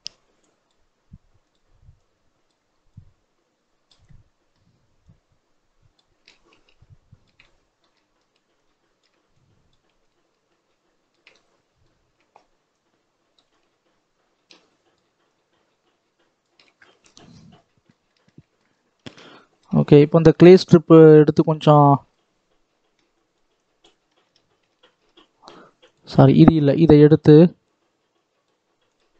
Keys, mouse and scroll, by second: 1.4-4.0 drag, 4.0 middle click, 4.9-7.3 drag, 7.3-8.4 middle drag, 8.4-11.2 shift+drag, 11.2-12.6 middle drag, 12.6-16.7 drag, 16.7-17.4 scroll down 11, 17.6-18.6 middle drag, 18.6-21.0 scroll up 2, 21.0 click, 21.4 middle click, 22.0-23.1 scroll up 2, 23.1-24.1 drag, 24.1 ctrl+z, 24.6 ctrl+z, 25.9-28.9 drag.